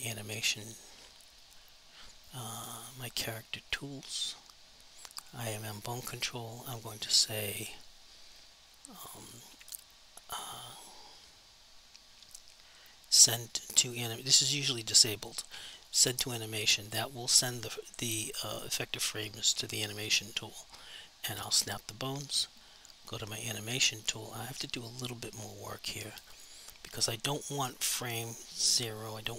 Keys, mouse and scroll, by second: 3.7 click, 9.6 click, 13.5 click, 21.5 click.